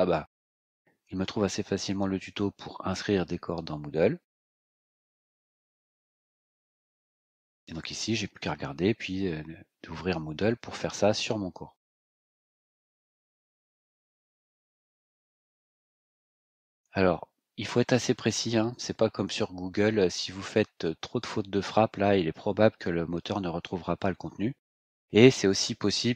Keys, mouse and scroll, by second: 5.3 click, 6.4-7.8 scroll down 6, 12.8 click, 15.2 click, 18.7 click.